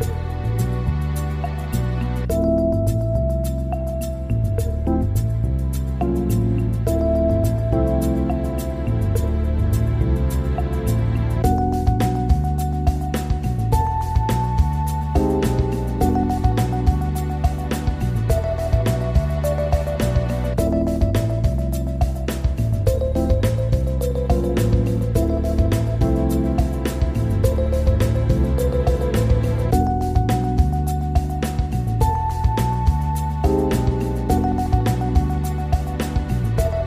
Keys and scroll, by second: 4.9 z, 6.1 ctrl+z, 11.4 ctrl+-, 13.2 ctrl+c, 13.3 ctrl+v, 18.3 ctrl+[, 20.8 ctrl+=, 22.8 Up, 27.2 Down, 35.0 ctrl+0, 36.7 ctrl+0.